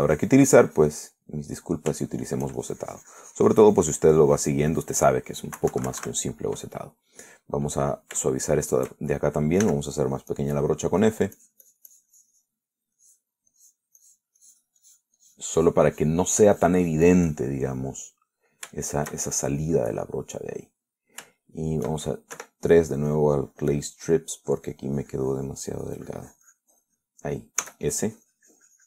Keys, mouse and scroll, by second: 2.5 middle click, 3.3 shift+middle click, 3.8-6.3 shift+drag, 6.8 Return, 7.5 middle click, 8.2-9.2 drag, 9.5 shift+click, 10.9 f, 12.6-13.9 drag, 14.2 click, 14.8 click, 16.0-18.8 drag, 19.0 middle click, 20.0-21.1 shift+middle drag, 21.2 middle click, 22.0-23.1 middle drag, 23.6 3, 23.7 click, 24.8-28.5 drag.